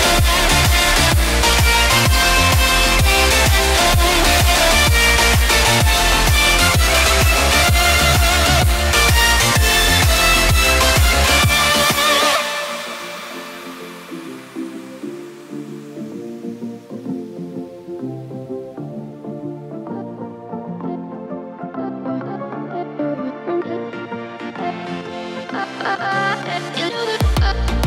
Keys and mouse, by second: 0.0 n, 1.7 s, 1.9 y, 3.3 g, 3.6 y, 5.7-6.4 middle drag, 7.2 ctrl+a, 8.0-8.6 middle drag, 9.4-10.8 middle drag, 11.2-12.5 middle drag, 13.4 middle click, 14.0 middle click, 15.0 KP_7, 15.6 KP_1, 17.3-18.7 typing, 19.0 KP_Enter, 20.4 ctrl+z, 21.7-22.5 typing, 22.8 KP_Enter, 23.6 middle click.